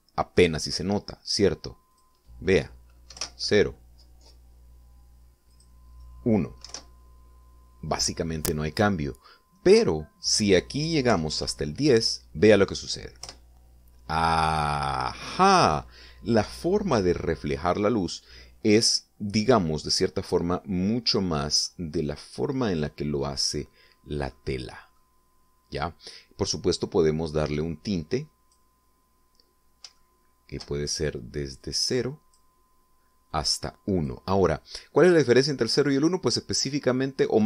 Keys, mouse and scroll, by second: 2.9 click, 4.1 0, 4.2 Return, 6.5 click, 7.6 1, 10.7 click, 11.8-12.8 typing, 14.2 Return, 21.5-22.8 middle drag, 23.5 middle click, 25.3 middle click, 28.6 click, 31.0 shift+middle click, 32.6 click, 34.3 click.